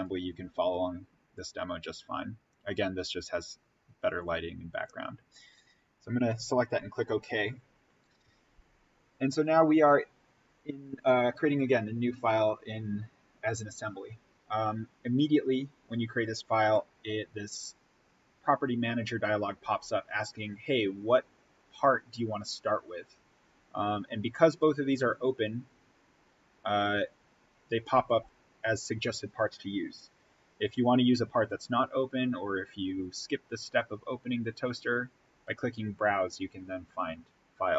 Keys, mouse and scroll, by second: 5.4 click.